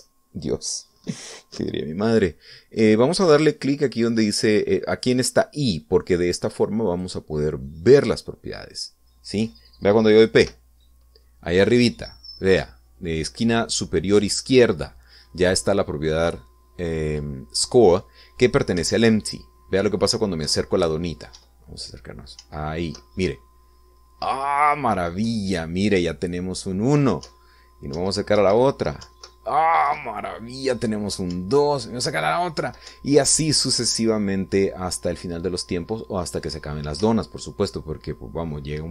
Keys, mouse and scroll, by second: 8.1 click, 11.6 p, 20.0 Up, 22.5 Right, 23.6 Up, 26.4 Left, 28.4 Up, 29.1 Right, 30.2 Up, 31.0 Left, 31.9 Left, 32.5 Up, 34.1 Right, 38.2 Up.